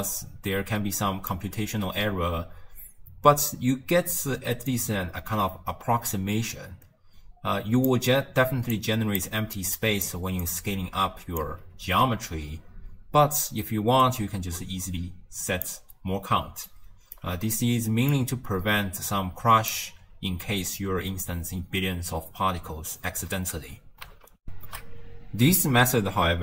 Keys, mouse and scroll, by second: 0.0-3.0 drag, 4.7-7.8 drag, 8.4 d, 8.8-9.2 drag, 9.2 d, 9.6-10.1 drag, 10.1 d, 10.5 click, 11.4 d, 11.5 d, 11.6 d, 14.1-16.5 drag, 16.5 d, 16.7 right click, 17.2 d, 17.3 d, 18.1-21.2 drag, 24.4 n, 24.5 ctrl+alt+shift+q.